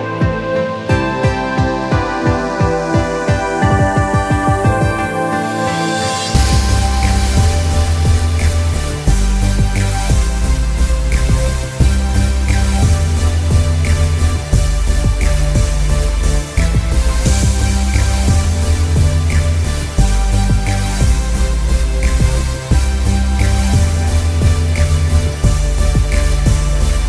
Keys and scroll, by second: 2.6 ctrl+alt+shift+Return, 4.9 ctrl+t, 5.9 ctrl+Return, 8.2 ctrl+i, 8.5 b, 12.1 x, 19.8 ctrl+m.